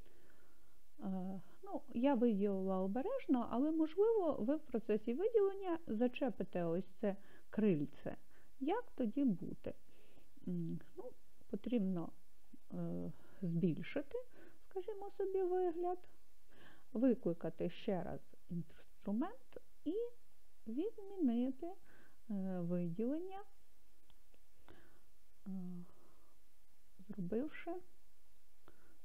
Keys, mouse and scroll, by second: 12.5 right click, 13.7-15.3 scroll up 5, 15.3-15.6 scroll up 1, 18.6 c, 22.4 middle click, 25.0 click, 26.8 middle click, 28.3 middle click.